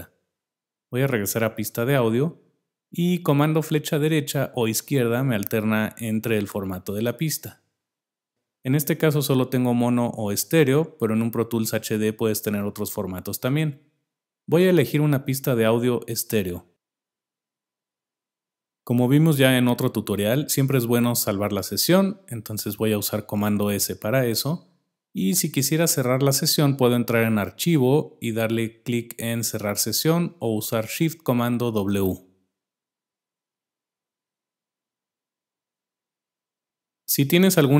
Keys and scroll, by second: 1.4 super+Down, 4.5 super+Right, 5.4 super+Left, 7.4 super+Left, 16.8 Return.